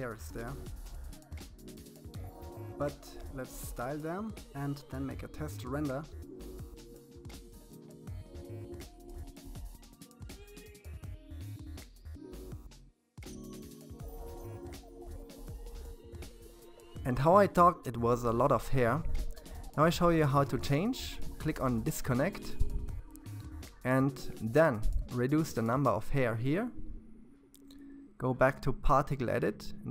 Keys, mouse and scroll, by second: 0.0-1.6 shift+middle drag, 1.7 f, 3.9-6.3 scroll up 19, 6.6 click, 6.9-8.0 drag, 8.8 click, 11.2 click, 13.6-14.0 scroll up 2, 14.0 f, 15.4-29.9 drag.